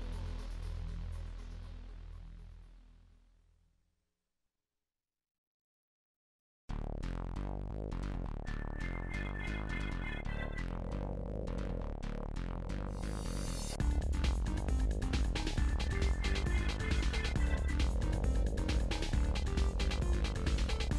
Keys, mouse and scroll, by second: 0.1 shift+middle click, 0.4 shift+middle click, 0.6 shift+middle click, 0.8 shift+middle click, 1.1 shift+middle click, 1.3 g, 2.1-3.0 scroll down 45, 2.5 middle click, 3.1-4.5 middle drag, 4.5 click, 5.0 3, 5.1 shift+click, 5.5 shift+click, 6.3 e, 7.1-8.2 drag, 8.2 middle click, 9.2 click, 9.5 middle click, 10.2 click, 10.4 KP_1, 10.7 click, 11.7 s, 12.6 click, 13.5 s, 14.0 click, 14.6 s, 15.3 click, 16.2 s, 17.1 shift+middle click, 17.3 click, 18.1 s, 18.6 scroll up 1, 18.7 click, 19.4 s, 20.4 scroll down 1, 20.6 shift+middle click.